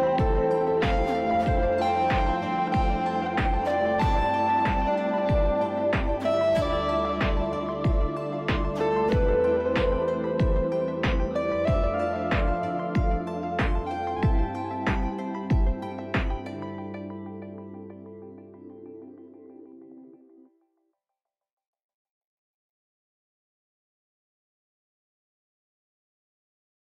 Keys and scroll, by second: 0.1 s, 1.0 ctrl+z, 2.7-3.7 typing.